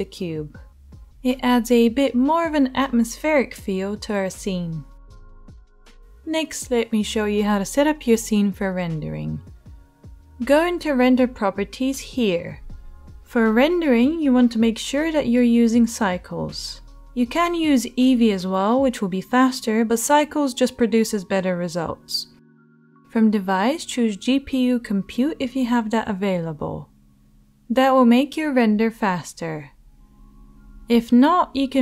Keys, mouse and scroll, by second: 3.2 ctrl+z.